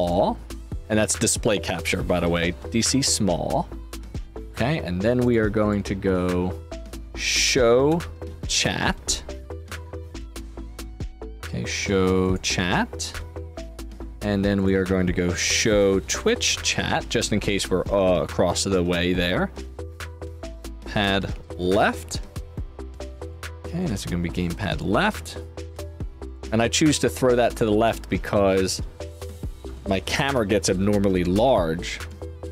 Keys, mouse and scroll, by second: 0.5 click, 0.7 click, 1.2-2.6 typing, 3.7 click, 7.3-8.8 typing, 9.6 click, 12.1 click, 13.8 click, 14.5 click, 14.9-17.2 typing, 18.8 click, 20.6 click, 20.6-22.2 typing, 23.1 click, 24.6 click, 26.2 click, 27.5 click, 29.6-31.3 typing, 31.6 scroll down 2, 32.0 click.